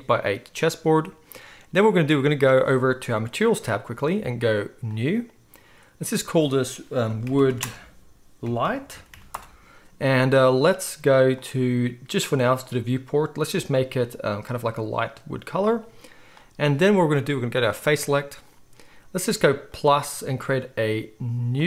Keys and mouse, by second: 3.5-5.1 middle drag, 5.1-13.7 drag, 7.4 o, 13.7-17.8 middle drag, 17.8-21.6 drag.